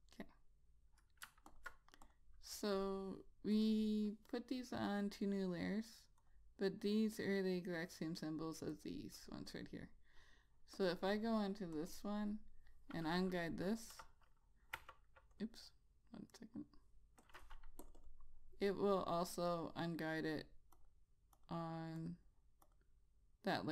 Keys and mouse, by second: 1.9 alt+click, 12.3 double click, 13.6 click, 14.3 -, 15.1 -, 15.7 click, 16.7 right click, 17.6 click, 18.4 double click, 20.6 click.